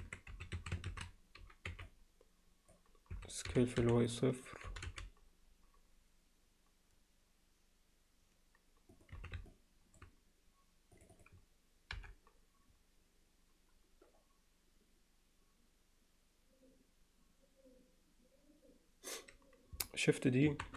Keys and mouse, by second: 0.0 Tab, 0.3 z, 0.6 a, 1.7 b, 3.1 s, 4.7 g, 9.2 z, 9.5 middle click, 11.2 click, 12.0 KP_7, 20.5 shift+d.